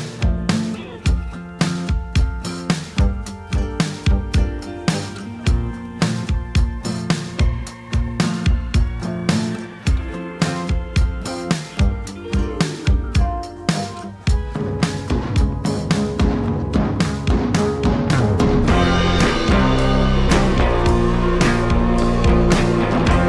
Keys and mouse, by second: 0.9-2.3 ctrl+drag, 2.4 ctrl+z, 2.4 f, 2.6-6.4 drag, 6.6 shift+middle click, 6.9 shift+click, 6.9 shift+w, 7.2 shift+click, 7.7 Delete, 8.0 ctrl+click, 8.4 Tab, 8.5 click, 9.1-11.4 drag, 11.6 middle click, 11.8-13.2 drag, 13.5 middle click, 14.1 middle click, 14.5 middle click, 15.4 ctrl+z, 15.4-17.3 drag, 17.5 f, 17.7 click, 18.2 ctrl+middle click, 18.7 middle click, 19.1 f, 19.9 click, 20.6 ctrl+z, 20.8 click, 21.4 click, 22.0 g.